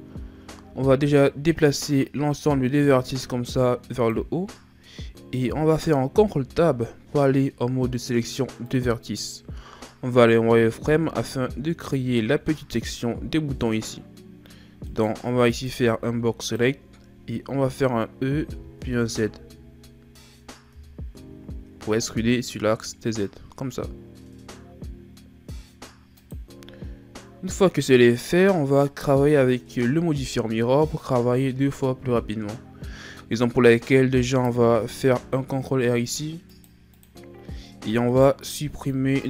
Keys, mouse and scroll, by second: 1.6 click, 4.9-6.2 scroll up 2, 6.2 ctrl+Tab, 10.4 z, 11.5-11.9 scroll down 1, 11.9-13.1 scroll up 4, 13.1-14.9 scroll up 1, 14.9 right click, 15.3 b, 17.3-18.4 shift+scroll down 1, 18.4 e, 30.0-32.0 shift+scroll up 2, 34.6 ctrl+r, 38.1 right click, 38.6 b.